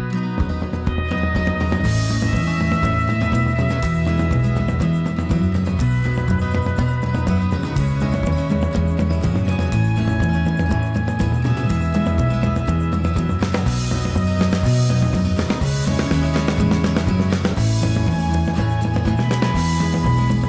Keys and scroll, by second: 1.9 ctrl+h, 4.8 ctrl+z, 10.5 Escape, 12.8 ctrl+g, 13.2 ctrl+x, 14.2 Escape, 14.9 Escape, 15.1 Escape.